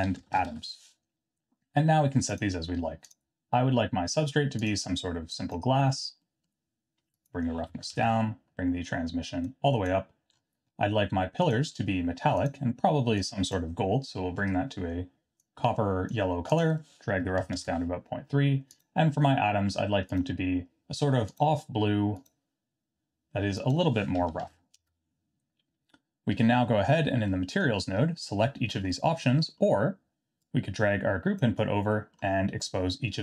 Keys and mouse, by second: 2.3 click, 6.3 middle click, 7.3-8.5 drag, 9.5 click, 11.4 click, 15.5 click, 16.6-18.1 drag, 18.7 click, 20.1 click, 23.6-25.4 drag, 27.4 middle click, 29.3 middle click, 30.5 click, 32.0 middle click.